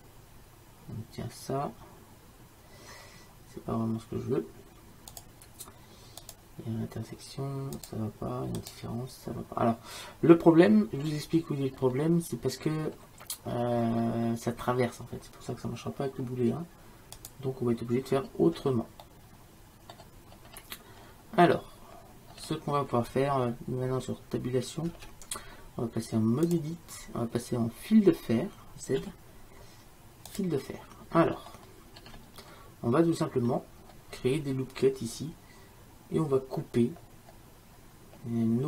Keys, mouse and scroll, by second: 5.2-7.8 drag, 11.1 middle click, 11.1-11.6 scroll up 1, 11.9 scroll up 1, 12.7-17.2 middle drag, 12.8 scroll down 1, 17.2-19.1 drag, 19.1-21.6 middle drag, 25.0 Tab, 29.1 z, 31.3 middle click, 32.1-33.6 middle drag, 36.8-38.6 middle drag.